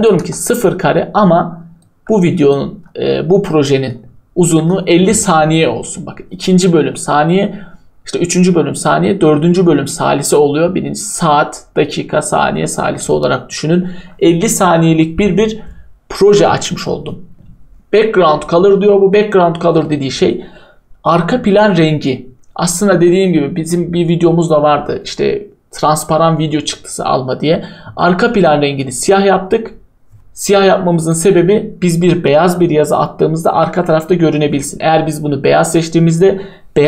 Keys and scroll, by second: 0.2 0, 4.2-5.0 typing, 10.2-10.9 typing.